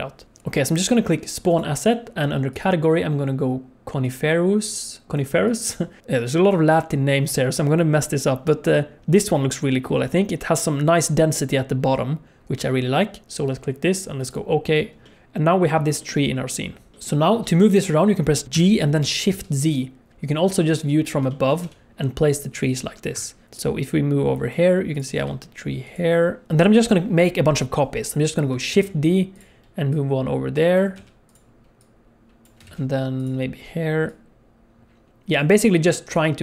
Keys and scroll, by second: 16.6 z, 16.9 alt+a, 18.5 g, 21.6 g, 25.1 g, 26.4 space, 28.7 shift+d, 30.9 g, 32.6 shift+d, 36.1 shift+d.